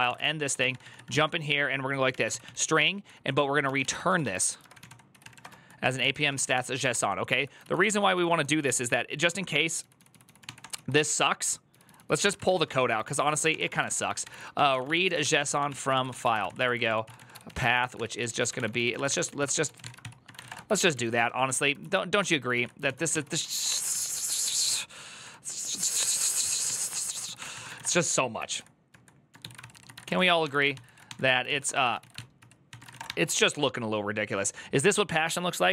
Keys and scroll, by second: 0.0-23.9 typing, 1.9 Tab, 2.1 ctrl+c, 5.8 ctrl+c, 5.9 ctrl+c, 12.9 ctrl+c, 21.2 ctrl+d, 21.6 ctrl+u, 25.0-33.1 typing.